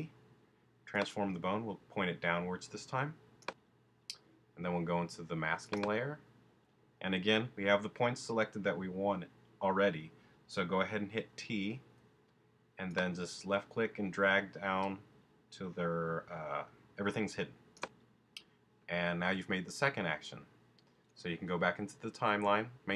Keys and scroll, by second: 11.4 t.